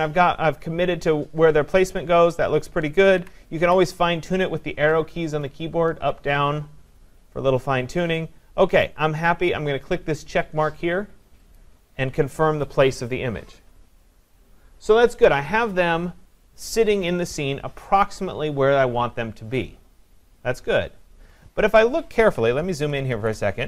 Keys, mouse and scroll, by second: 11.6 Up, 11.6 click, 16.6 click, 22.3 click, 22.7 ctrl+=, 23.1 ctrl+=.